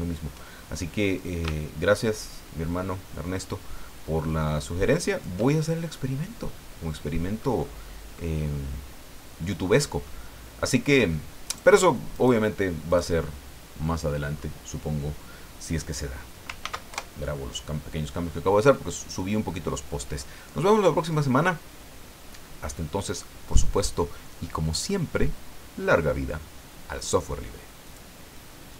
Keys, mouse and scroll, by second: 1.2-5.4 shift+drag, 6.1 scroll down 2, 6.5-7.6 middle drag, 8.1-9.9 middle drag, 10.1 middle click, 10.7-11.0 scroll up 2, 11.5 right click, 12.1 right click, 12.9 right click, 13.4 scroll down 1, 13.8 middle click, 16.6 ctrl+s, 16.9 ctrl+KP_Enter, 27.8 click, 28.7 click.